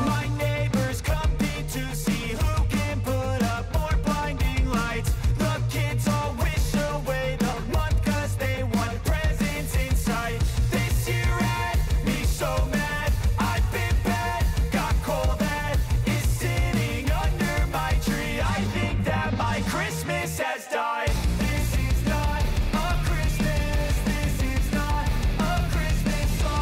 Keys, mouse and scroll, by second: 2.1 space, 4.1 click, 4.5 space, 6.9 space, 8.7 click, 9.9-10.4 typing, 10.8 right click, 11.6-20.3 drag, 21.5 Return, 23.0 click, 24.2 Return, 24.8 space.